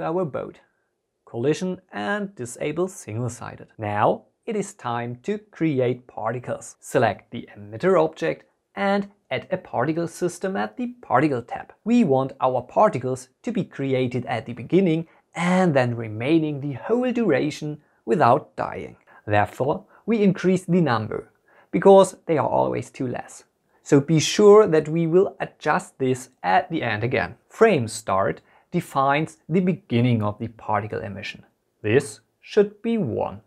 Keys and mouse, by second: 2.3 click, 3.2 F2, 5.9 drag, 7.3 click, 12.2-14.6 drag, 15.7 click, 19.7-22.6 drag, 28.7-32.8 drag.